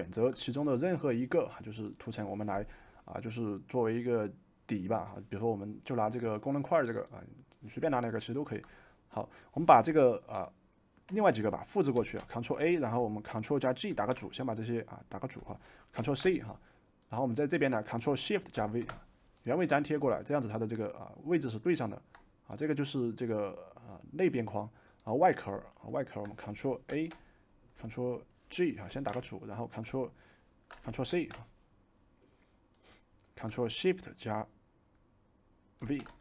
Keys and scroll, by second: 12.0 ctrl+a, 13.9 ctrl+g, 16.0 ctrl+c, 18.5 ctrl+shift+v, 26.9 ctrl+a, 28.9 ctrl+g, 31.1 ctrl+c, 35.8 ctrl+shift+v.